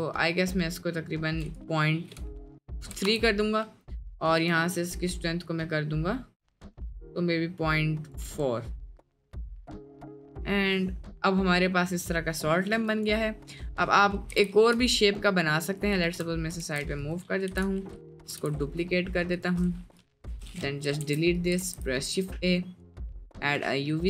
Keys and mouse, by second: 1.5-3.0 drag, 4.4 click, 5.3-8.2 shift+drag, 8.6 middle click, 9.2-10.2 middle drag, 10.4-12.2 middle drag, 12.5 middle click, 13.8 middle click, 14.3 g, 16.7 shift+d, 17.4 g, 18.2 g, 20.0 click, 20.2 Delete, 21.0 shift+s, 21.5 shift+a.